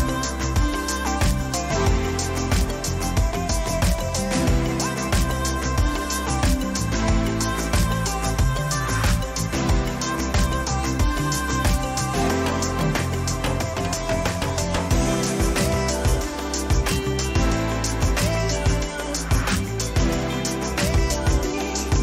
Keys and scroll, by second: 9.6 Down, 13.1 Return, 15.4 Down, 17.7 ctrl++, 18.2 Down.